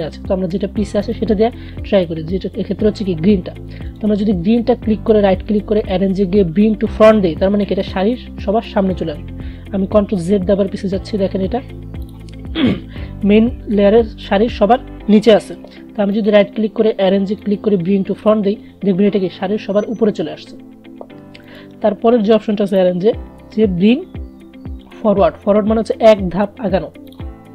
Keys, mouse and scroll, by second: 4.0 right click, 6.0 click, 10.8 ctrl+z, 12.0 click, 16.3 right click, 21.6 right click, 22.8 click, 27.2 click.